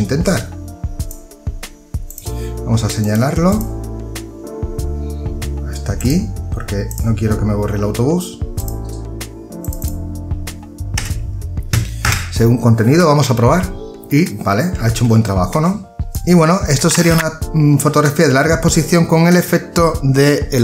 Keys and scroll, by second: 10.6 Delete, 11.6 Return, 14.6 ctrl+d.